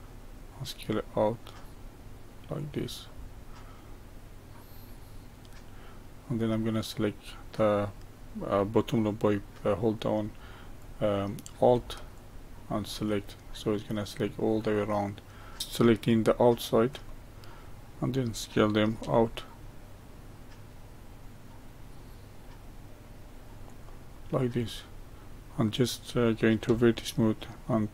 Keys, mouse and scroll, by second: 3.1-6.1 middle drag, 10.8 click, 12.2 alt+click, 13.5-15.6 middle drag, 15.6 ctrl+z, 17.1-19.0 middle drag, 19.0 s, 24.2-25.0 middle drag, 25.0-26.7 scroll up 2, 26.7 1.